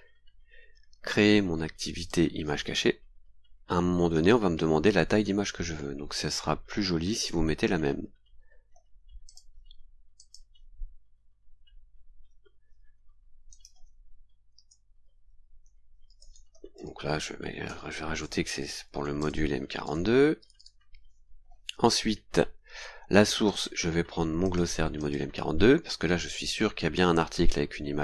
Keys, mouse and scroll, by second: 0.5-1.2 scroll down 4, 2.0 click, 3.3 scroll down 1, 9.2 click, 10.1 click, 13.5 click, 14.5 space, 15.8-20.5 typing, 21.3-21.6 scroll down 2, 22.2-22.5 scroll down 2, 23.4 click, 24.4 click, 24.9 click.